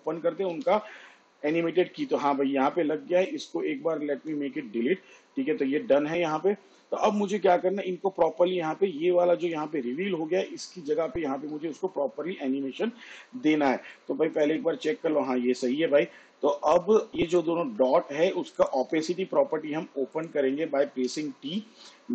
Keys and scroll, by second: 0.8 u, 4.5 Delete, 18.1 Caps_Lock, 21.4 t.